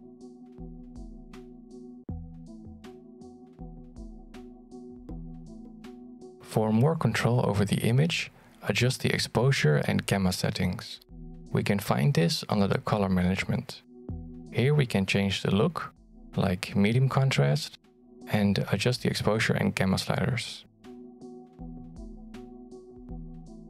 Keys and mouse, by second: 5.6 alt+shift+z, 6.1 shift+middle click, 23.5 click.